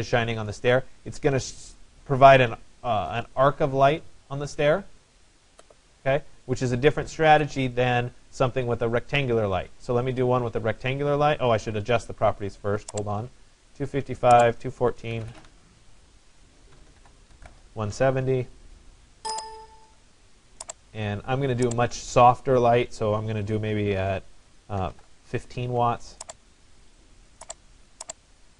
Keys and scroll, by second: 14.7-18.0 typing, 16.8 Tab, 24.5 1, 25.0 5, 25.7 Tab.